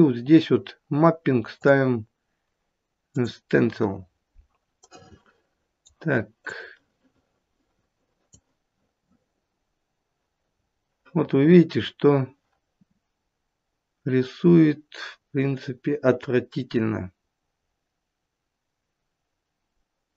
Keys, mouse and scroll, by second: 1.5 click, 4.8 right click, 6.5 click, 10.5-11.6 scroll up 9, 11.9-12.4 scroll down 1, 14.0-14.6 scroll down 1, 15.1-16.1 scroll up 1, 16.1-17.1 scroll down 3.